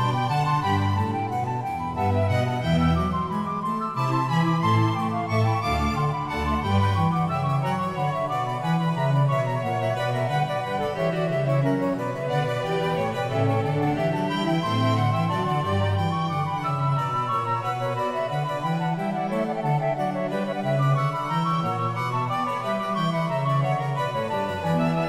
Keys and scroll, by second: 22.2 ctrl+t.